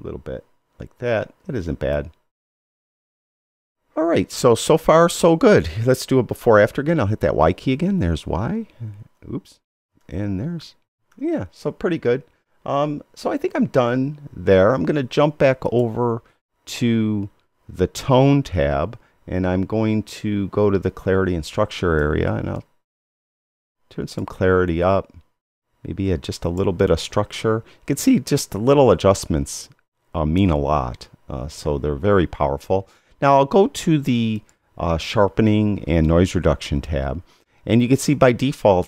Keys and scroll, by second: 8.0 y, 10.0 y.